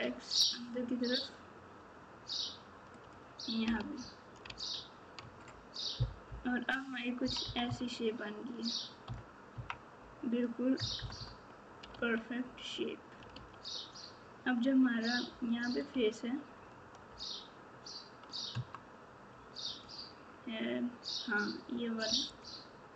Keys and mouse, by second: 3.7 alt+z, 5.2 Tab, 6.2 KP_4, 7.2 KP_6, 7.4 KP_6, 7.6 KP_6, 9.0 KP_Subtract, 10.7 KP_Add, 11.0 KP_Add, 11.1 KP_Add, 15.2 3.